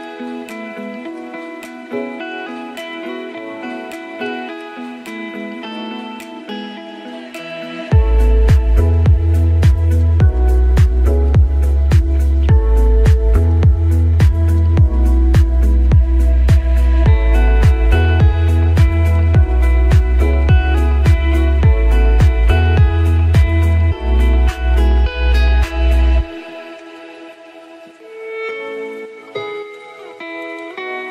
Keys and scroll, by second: 3.6 ctrl+t.